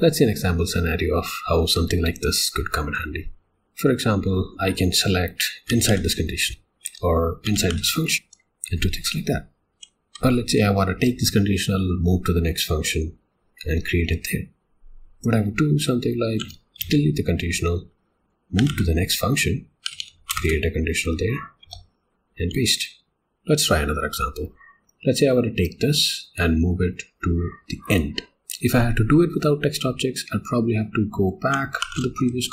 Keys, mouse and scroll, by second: 5.7 v, 6.9 Escape, 7.4 v, 8.3 Escape, 9.7 k, 19.6-20.7 typing, 21.7 Escape, 22.4 p, 23.1 click, 28.1 click, 28.4 Escape, 32.2 ,.